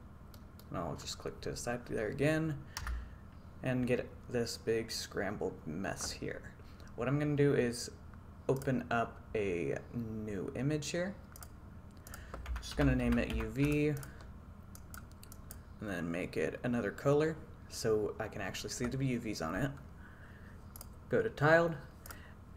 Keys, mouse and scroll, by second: 0.4 middle click, 2.9 a, 8.7-22.3 drag.